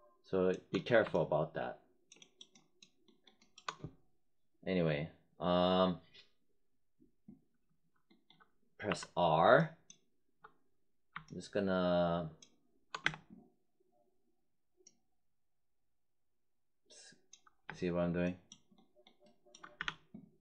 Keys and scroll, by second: 8.8 r, 13.0 space, 17.6 space, 19.7 z.